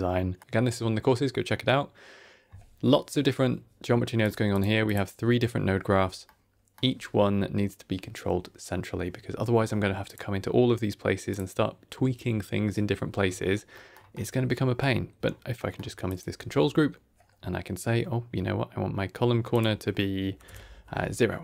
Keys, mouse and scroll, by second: 4.1 click, 4.4 click, 4.8 click, 6.1 middle click, 10.0 click, 11.2 click, 13.2-13.6 scroll up 3, 13.6 middle click, 14.1-14.4 scroll up 2, 14.4 middle click, 15.1-15.5 scroll up 3, 15.5 middle click, 16.0 click, 16.3 Tab, 20.4 click, 21.1 middle click.